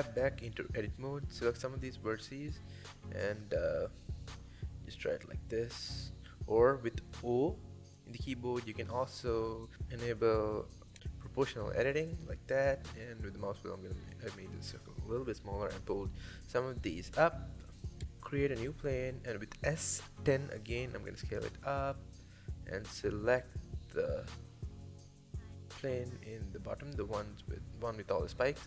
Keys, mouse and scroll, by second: 0.0 click, 0.6 g, 3.5 shift+click, 3.8 g, 5.6 o, 6.5 g, 10.5 click, 11.0 g, 12.1 Tab, 12.3-14.0 middle drag, 14.0 KP_7, 14.3 Tab, 14.6 Tab, 14.8 scroll down 2, 15.1-16.0 middle drag, 16.0 shift+a, 18.1 s, 19.9 scroll up 3, 20.3 middle click, 20.7 scroll up 1, 21.0-21.5 middle drag, 21.5 click, 22.1 click, 22.6 click, 23.2-24.0 scroll down 2, 24.0 g, 25.3 click, 25.6 click, 25.9-26.7 middle drag, 26.7 g.